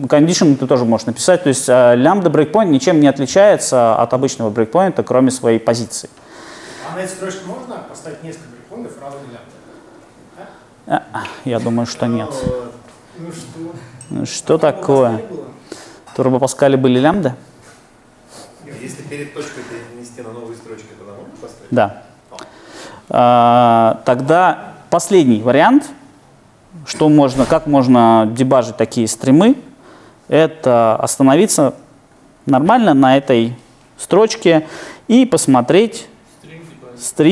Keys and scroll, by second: 22.1 super+F2.